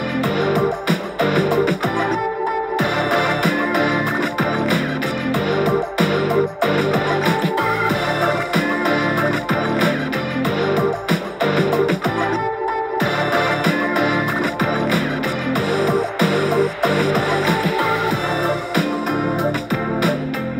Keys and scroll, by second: 1.9 super+t, 2.5 super+z, 3.1 super+t, 8.2 super+t, 8.3 Right, 8.4 Right, 10.4 Down, 10.5 Down, 10.8 Right, 13.3 super+t, 13.8 super+z, 14.6 super+t, 18.9 super+t, 19.1 Right, 19.5 Right, 19.6 Right, 19.8 Right, 19.9 Up.